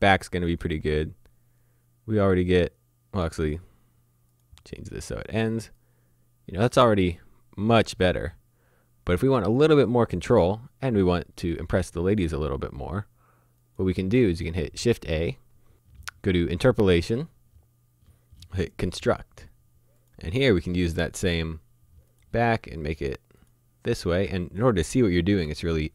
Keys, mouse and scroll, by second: 13.7 click, 14.8 shift+a, 18.6 click.